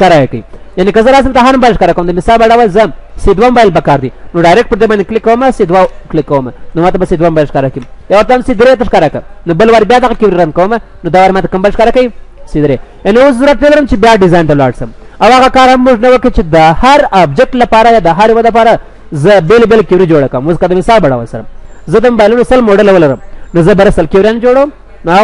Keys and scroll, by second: 7.2 ctrl+w, 10.7 ctrl+w.